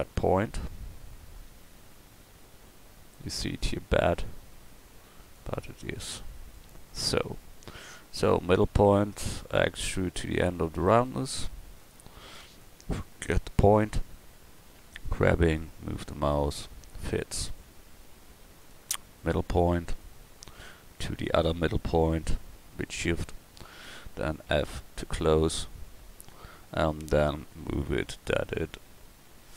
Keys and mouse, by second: 0.6 g, 9.6 e, 14.0 g, 19.3 click, 19.9-23.8 middle drag, 24.5 f, 27.4 g.